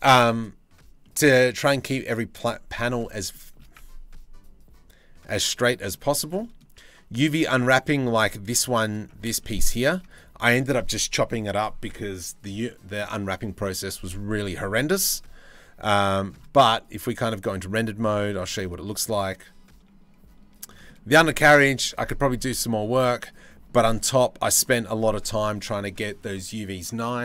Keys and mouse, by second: 0.6 middle click, 2.9 shift+middle click, 4.9 middle click, 5.8 shift+middle click, 6.0 middle click, 6.5 Tab, 7.3 right click, 9.0 shift+right click, 9.7 click, 9.8-14.7 middle drag, 14.7-15.9 drag, 20.1-22.2 shift+middle drag, 22.3-23.3 middle drag, 23.6 shift+middle click.